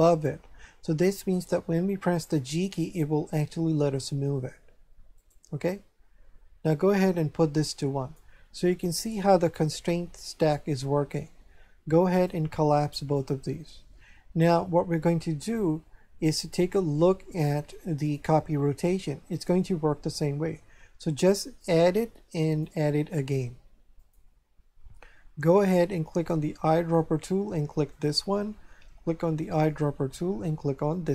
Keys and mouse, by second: 2.4 g, 5.1 right click, 6.9 click, 12.1 click, 18.0 click, 21.6 click, 24.0 click, 26.1 click, 27.9 click, 29.4 click, 30.9 click.